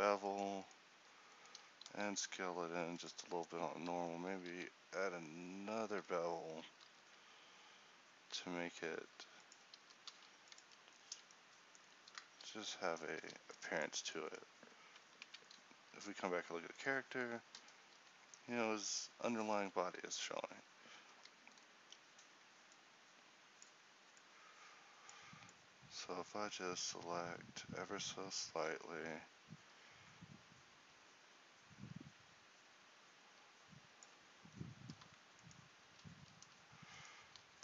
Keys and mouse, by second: 1.9 alt+s, 4.6 ctrl+n, 6.8 ctrl+b, 9.8 g, 10.7 Tab, 12.1 ctrl+c, 12.6 ctrl+t, 13.2 a, 16.1 a, 19.5 Tab, 20.0 z, 21.3 a, 21.9 a, 25.4 click, 25.6 ctrl+e, 34.8-36.2 middle drag, 36.2 z.